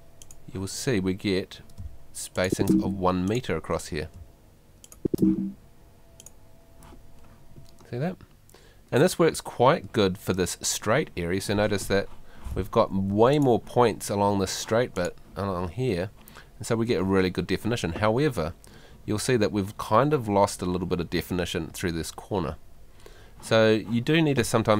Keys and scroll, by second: 1.8 space, 4.2 space, 12.7 Escape.